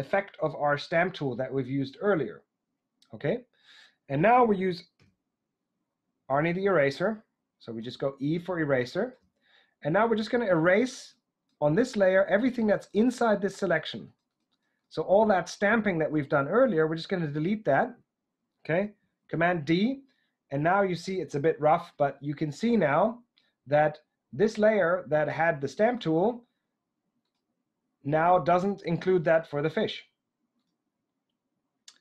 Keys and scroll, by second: 5.0 e, 8.3 typing, 19.1 super+d.